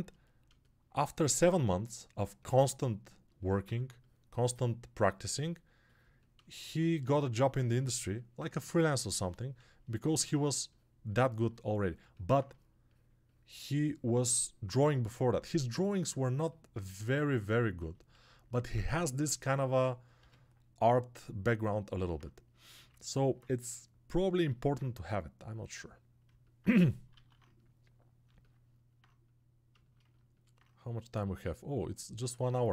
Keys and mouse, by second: 16.3-18.6 shift+right drag, 18.6-32.7 shift+drag.